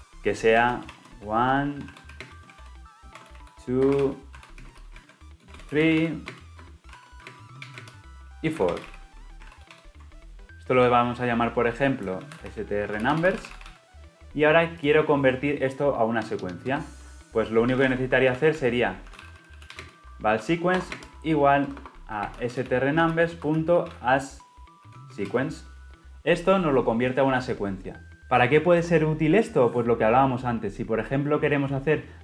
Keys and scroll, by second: 1.2 shift+Return, 9.4 ctrl+alt+l, 10.3 ctrl+alt+o, 23.3 Return.